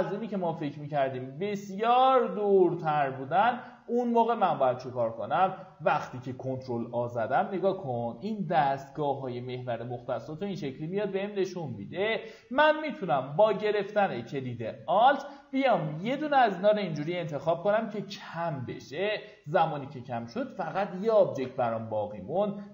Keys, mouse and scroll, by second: 0.3 click, 0.8 w, 1.4 click, 4.2 q, 4.4 click, 4.8 z, 5.8 ctrl+a, 15.8 alt+click, 21.4 z, 22.6 alt+w.